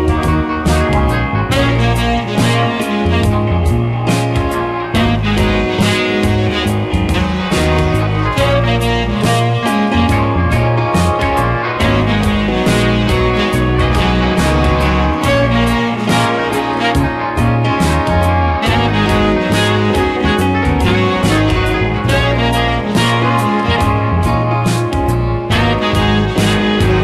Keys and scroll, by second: 2.1 space, 2.5 space, 3.1 space, 4.4 space, 14.0 space, 19.4 space, 23.7 ctrl+z, 26.3 space.